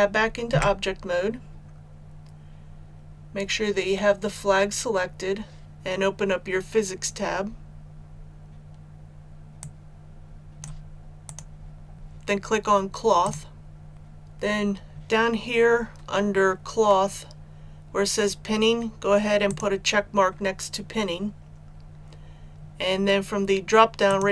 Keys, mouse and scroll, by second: 0.4 Tab, 9.5-10.9 drag.